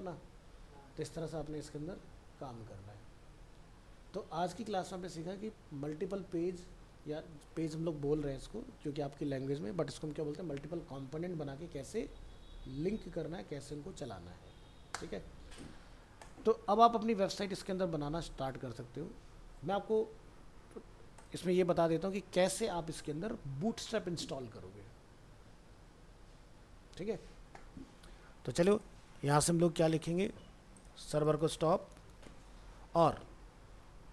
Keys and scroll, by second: 16.6 ctrl+s, 21.8 ctrl+s, 22.2 ctrl+w, 22.5 ctrl+s, 22.7 ctrl+w, 31.9 ctrl+c.